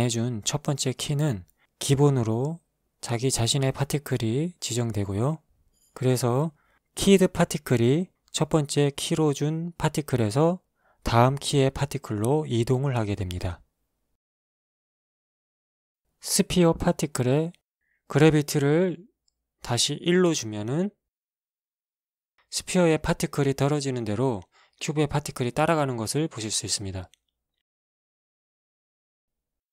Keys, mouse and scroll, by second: 8.8 alt+a, 11.5 alt+a, 14.3 Escape, 16.8 right click, 18.3-20.0 drag, 20.6 click, 21.6 alt+a, 24.3 Escape, 25.2 alt+a, 25.8 alt+shift+a, 25.9 shift+middle click, 27.3 Escape, 28.3 click, 29.3 shift+middle click.